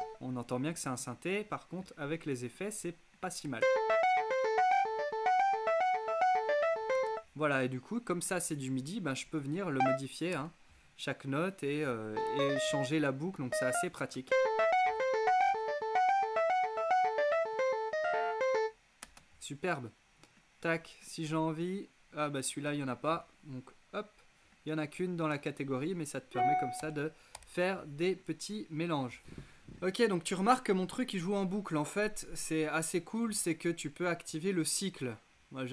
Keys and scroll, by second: 3.5 space, 7.0 space, 10.4 BackSpace, 14.3 alt+space, 15.1 space, 19.1 space, 26.9 BackSpace.